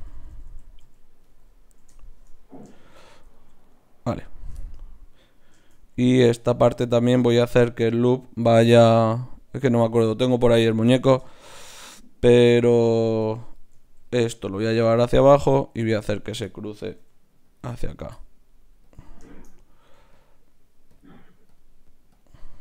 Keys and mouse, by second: 0.8 f, 4.2-5.9 right drag, 6.3 ctrl+Tab, 16.1-19.7 right drag, 17.0 g, 18.8-22.6 drag.